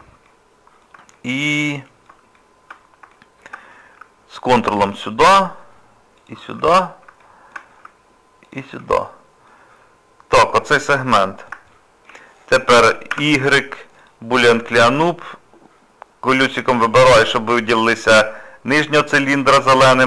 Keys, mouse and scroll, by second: 1.1 middle click, 2.4 shift+middle click, 4.7 ctrl+click, 6.7 scroll up 1, 6.8 scroll down 2, 7.2 shift+middle click, 8.5 ctrl+click, 9.0 scroll down 1, 9.5 middle click, 11.7 shift+middle click, 13.1 y.